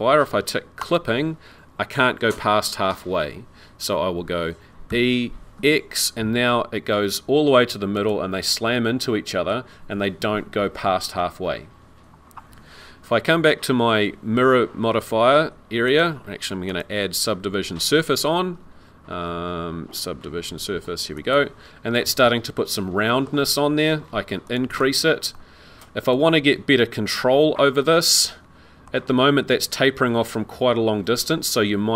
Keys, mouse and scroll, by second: 0.8 click, 4.9 e, 8.6 middle click, 15.9 click, 16.7 click, 22.0 middle click, 24.5 click, 24.7 click, 25.3 middle click, 27.8 middle click.